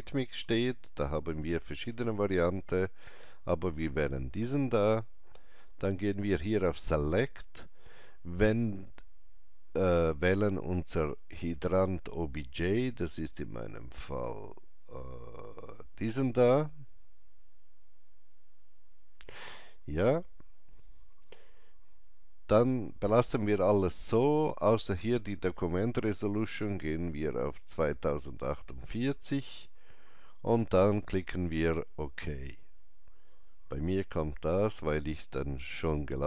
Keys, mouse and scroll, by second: 1.2 click, 4.1 click, 19.4 click, 24.8 click, 31.9 click.